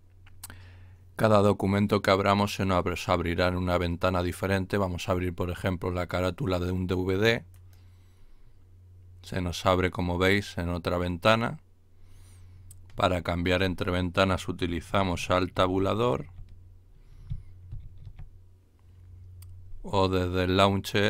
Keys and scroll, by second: 15.6 alt+Tab, 17.6 alt+Tab.